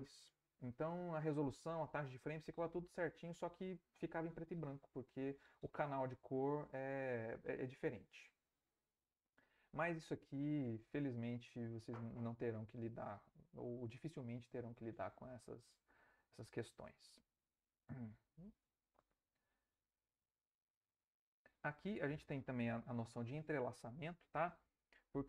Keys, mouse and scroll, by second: 15.2 Right, 18.4 Right, 20.5 click, 20.9 Right.